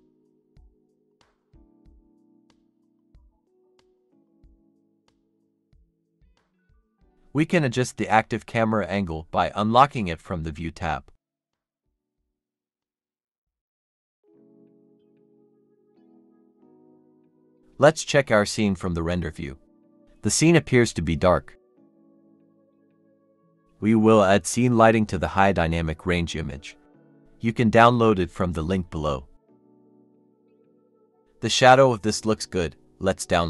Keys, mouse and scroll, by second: 0.0-1.2 typing, 4.8 Return, 5.4 Return, 9.5 shift+middle click, 10.0 middle click, 10.8 shift+middle click, 14.3 shift+middle click, 15.1 middle click.